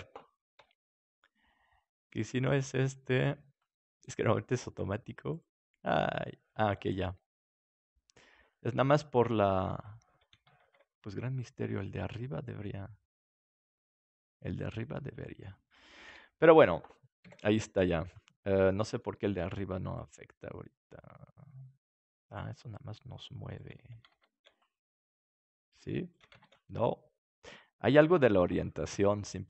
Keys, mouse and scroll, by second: 0.5 Tab, 0.9-3.6 drag, 0.9-3.5 right drag, 3.9-5.3 middle drag, 5.3-6.6 right drag, 5.8 click, 7.1 click, 10.5 ctrl+z, 11.0 middle click, 13.7 middle click, 14.9-17.2 middle drag, 16.0 KP_7, 17.2 b, 18.4-19.9 middle drag, 19.9-21.8 drag, 24.0 ctrl+z, 25.0-27.3 drag, 25.5-26.9 right drag, 26.3 ctrl+z, 26.7-29.4 middle drag.